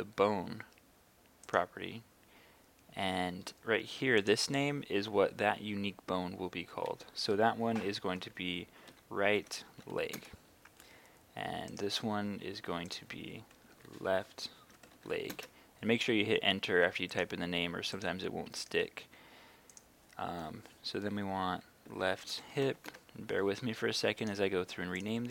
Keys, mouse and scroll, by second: 8.9-9.9 typing, 10.2 Return, 11.7 right click, 12.9 click, 13.7 shift+l, 14.9 typing, 15.3 Return, 17.2 right click, 19.8 click, 21.9-23.2 typing, 24.2 right click, 25.0 click.